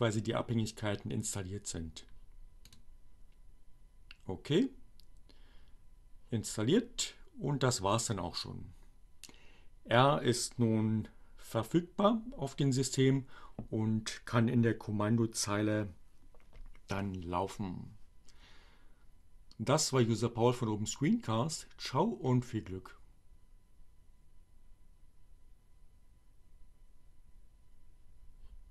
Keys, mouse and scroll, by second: 2.7 click.